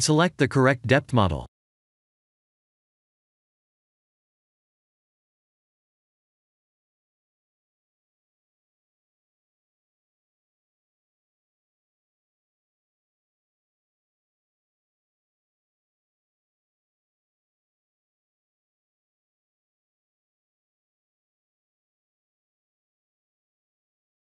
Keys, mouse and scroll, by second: 0.4 click, 2.4 click.